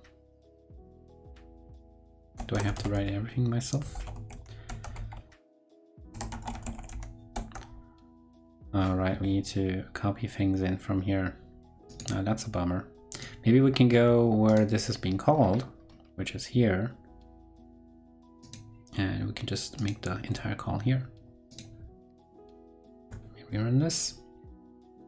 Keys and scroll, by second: 22.9 super+r.